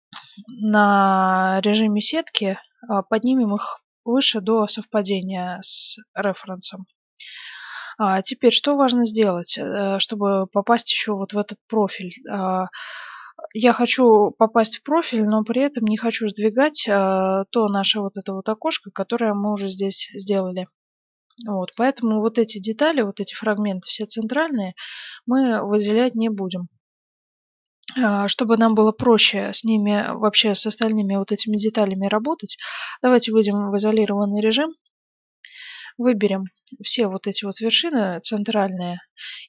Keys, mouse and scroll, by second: 0.0 z, 0.4 middle click, 3.3 g, 13.2-20.2 middle drag, 15.1 z, 21.4-24.6 middle drag, 24.8-27.1 middle drag, 33.2 KP_Divide, 35.1 middle click, 35.6 z, 36.3 a, 36.6 b, 37.1-38.3 drag.